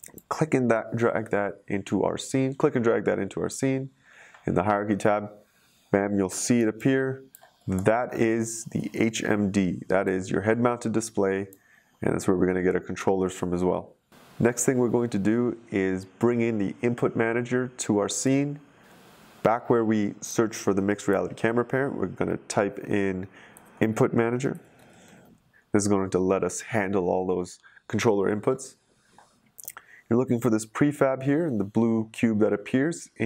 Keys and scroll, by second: 6.5 typing, 23.2-25.4 typing.